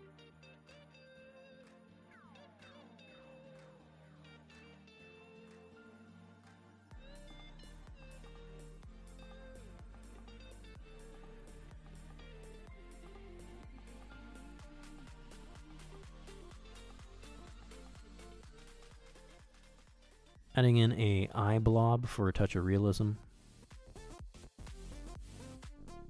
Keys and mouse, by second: 0.2 click, 0.6 middle click, 0.7 middle click, 1.0 middle click, 1.3 middle click, 1.5 middle click, 1.8 middle click, 2.0 click, 2.5 click, 2.8 shift+middle click, 3.1 click, 3.6 middle click, 3.9 click, 4.1 middle click, 4.3 middle click, 4.4 middle click, 5.0 shift+middle click, 5.3 middle click, 5.5 middle click, 5.8 click, 6.3 middle click, 6.4 middle click, 6.6 click, 6.8 middle click, 7.2 click, 7.5 ctrl+middle click, 7.8 shift+middle click, 8.0 f, 8.2 middle click, 8.4 click, 9.1 middle click, 9.4 middle click, 9.6 middle click, 9.8 middle click, 10.0 middle click, 10.5 middle click, 10.6 f, 10.8 click, 10.8 f, 11.2 x, 11.3 ctrl+click, 11.6 ctrl+click, 12.0 ctrl+click, 13.0 middle click, 13.2 middle click, 13.3 middle click, 14.8 KP_1, 15.2 ctrl+Tab, 16.9 shift+a, 18.0 click, 19.1 g, 19.6 click, 19.8 middle click, 20.0 middle click, 20.1 g, 20.4 KP_1, 20.5 shift+middle click, 20.9 shift+middle click, 21.5 s, 21.5 g, 21.7 g, 22.0 middle click, 22.4 middle click, 22.5 middle click, 23.2 middle click, 23.6 q, 24.1 q, 24.8 KP_1, 25.4 s, 25.7 ctrl+Tab.